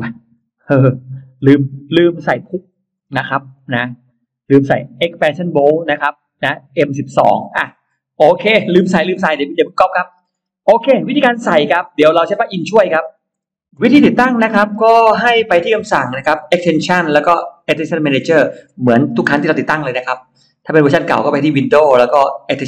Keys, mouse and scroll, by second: 0.9 middle click, 1.2-1.6 scroll down 1, 1.9-3.7 scroll up 5, 6.4-6.7 scroll down 2, 9.9-11.6 scroll down 4, 11.7 click, 12.3-14.0 scroll up 5, 13.7 middle click, 14.3 middle click, 14.7 scroll down 1, 15.0-15.3 scroll up 1, 16.3 click.